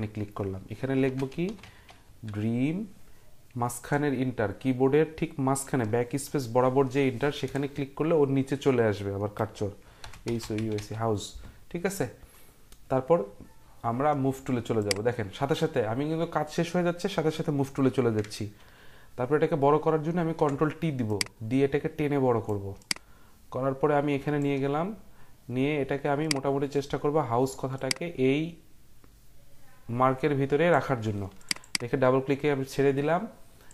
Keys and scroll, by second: 0.8-2.5 typing, 7.4 Return, 9.8-11.3 typing, 20.1 ctrl+t.